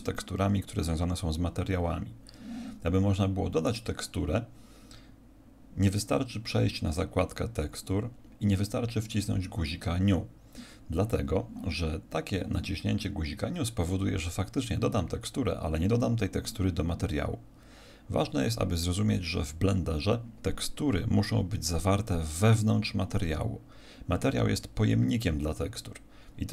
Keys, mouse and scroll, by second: 3.6 click.